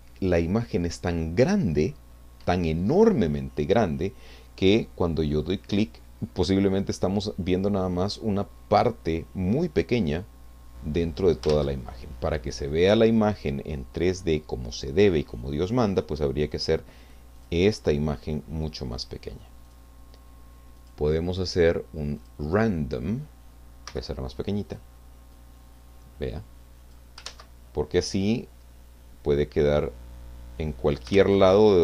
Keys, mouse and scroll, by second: 4.7 click, 11.8 ctrl+z, 17.4 click, 19.6 click, 20.8 click, 22.2 click, 23.9 f, 24.7 click, 25.4-27.1 drag, 27.3 ctrl+z, 28.1-31.4 drag, 31.1 ctrl+z.